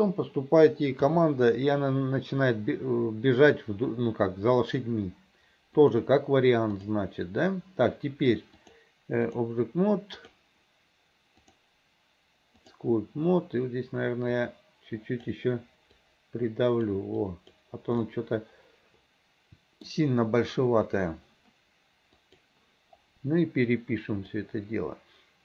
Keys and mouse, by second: 1.2 KP_3, 5.9 click, 6.8 click, 8.7 click, 11.6-12.9 drag, 14.5 click, 16.1 click, 17.3 click, 18.2-20.0 middle drag, 22.3 middle click, 24.5-25.4 middle drag.